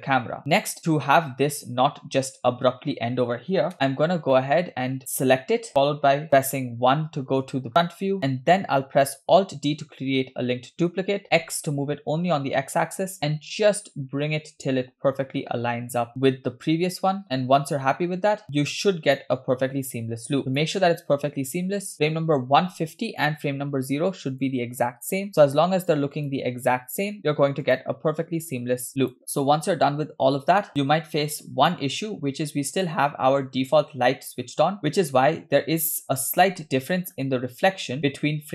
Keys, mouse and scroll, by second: 0.4 space, 0.6 drag, 2.4 space, 2.6 space, 3.7 KP_0, 4.0-4.3 scroll down 2, 4.3-5.0 middle drag, 5.7-6.2 scroll up 1, 6.3 KP_1, 7.7-8.3 scroll up 5, 8.0 shift+middle click, 9.8 alt+d, 17.2-18.4 scroll down 6, 17.2 KP_0, 18.4-19.3 drag, 20.6 click, 21.9 Right, 21.9 click, 24.4 click, 26.4 click, 27.9 click, 29.2 click, 29.5-30.7 space, 30.9 space, 31.7 click, 36.0 scroll up 2, 36.6-37.5 shift+scroll up 3, 36.7-37.0 shift+middle drag.